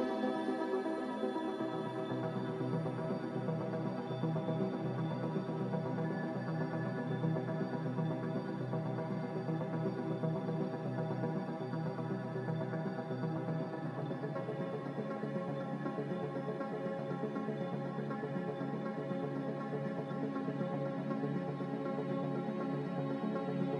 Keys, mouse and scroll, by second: 3.7 click, 14.0 z.